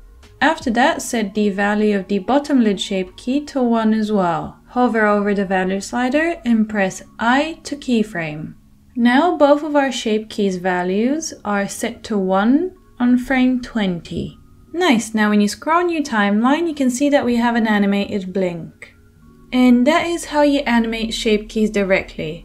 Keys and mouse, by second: 0.9-1.7 middle drag, 1.7-22.4 drag.